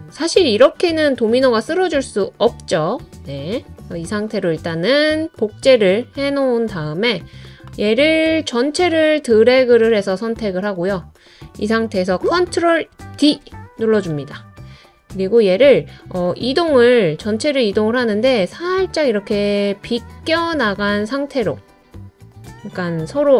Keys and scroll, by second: 13.2 super+d.